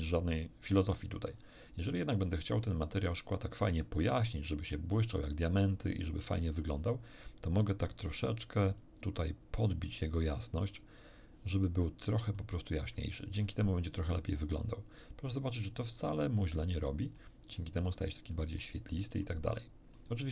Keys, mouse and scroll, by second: 2.6 click, 5.6-6.7 middle drag, 7.8-9.0 drag, 9.1 click, 10.1 click, 11.8 middle click, 12.7 middle click, 13.5 middle click, 15.3 click, 16.9 middle click, 17.5 middle click, 18.3 middle click, 19.0 middle click, 19.5 middle click.